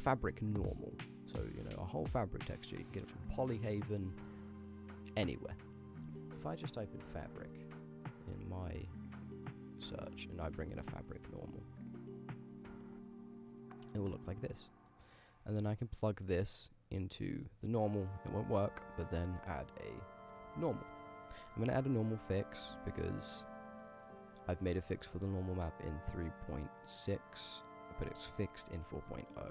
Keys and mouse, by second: 0.6 click, 11.9 click, 14.7 middle click, 15.9 click, 18.2 click, 18.7 shift+a, 22.7 shift+a.